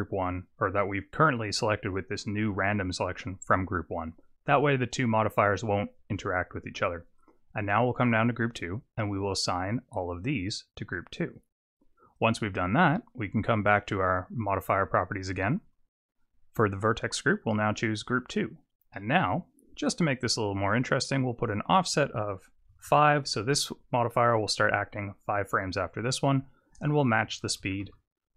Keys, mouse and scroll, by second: 7.2 click, 9.9 click, 12.1 click, 13.6 click, 14.9 Tab, 16.9 click, 18.9 middle click, 21.5 click, 26.6 click.